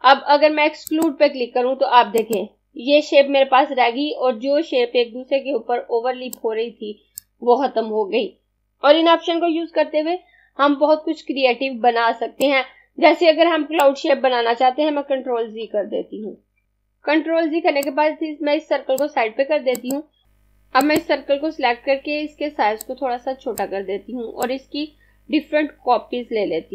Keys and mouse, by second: 0.6 click, 6.0 click, 12.5 click, 15.0 z, 15.7 z, 16.2 z, 17.9 click.